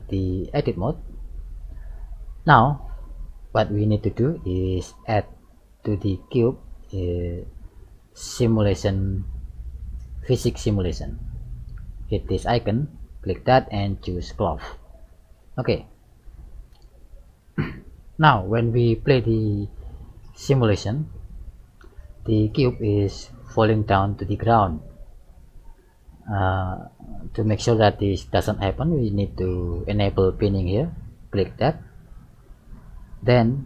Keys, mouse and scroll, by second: 0.3-1.2 scroll up 7, 1.2 shift+middle click, 1.8-2.2 scroll down 3, 3.1 middle click, 3.1 scroll down 1, 5.2 middle click, 12.5 click, 14.6 click, 15.9 middle click, 17.4-17.8 scroll down 1, 18.0 shift+middle click, 19.8 click, 21.4 click, 25.4 click, 26.7 middle click, 27.7-28.6 scroll up 4, 28.6 scroll down 2, 28.8 scroll up 1, 32.2 click.